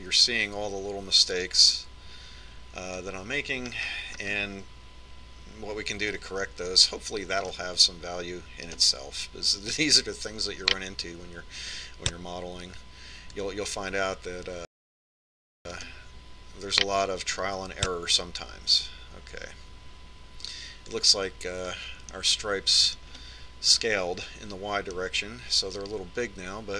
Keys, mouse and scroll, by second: 5.7-7.7 middle drag, 7.8-9.5 middle drag, 10.7-12.3 right drag, 12.0-13.7 drag, 16.8-18.5 right drag, 17.7-19.8 drag, 23.1-26.7 middle drag.